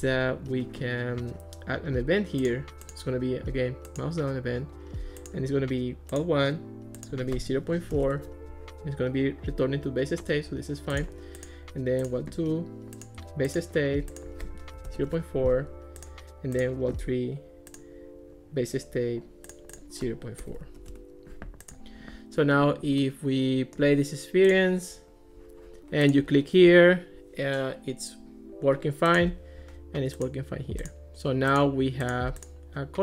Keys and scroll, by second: 7.5-8.4 typing, 14.8 ., 15.0 Return, 20.4-21.3 typing.